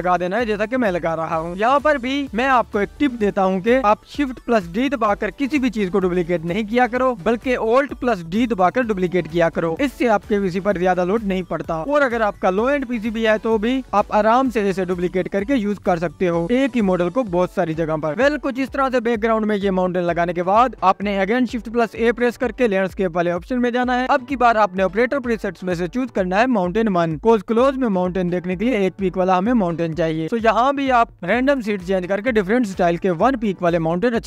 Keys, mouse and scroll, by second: 0.3 alt+d, 0.7 click, 1.5-2.8 drag, 3.6 click, 4.6-5.0 scroll down 4, 5.0-6.0 drag, 6.6-7.4 drag, 8.0 click, 8.9 click, 9.6-14.7 drag, 14.9 click, 15.7 drag, 16.3-17.9 drag, 18.6 alt+d, 19.1 click, 20.9 click, 21.3 shift+a, 23.6 KP_Decimal, 23.9-24.4 scroll up 1, 24.4-34.2 drag, 29.8-30.4 scroll down 1, 30.4-32.8 scroll down 1.